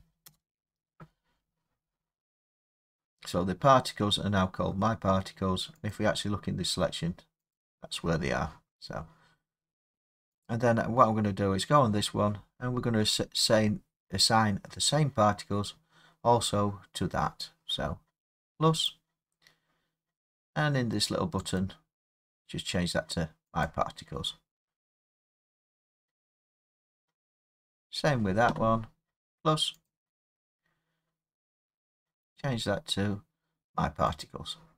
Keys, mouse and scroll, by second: 0.2 Return, 5.9 click, 7.5 click, 10.4 click, 18.9 click, 21.6 click, 23.6 click, 27.8 click, 29.9 click, 32.4 click, 34.2 click.